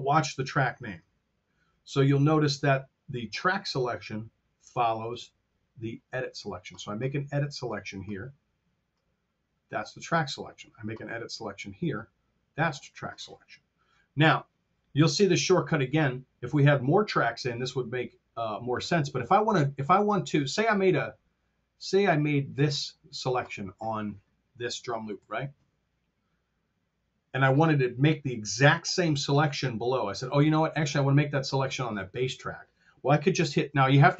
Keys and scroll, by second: 24.5 t.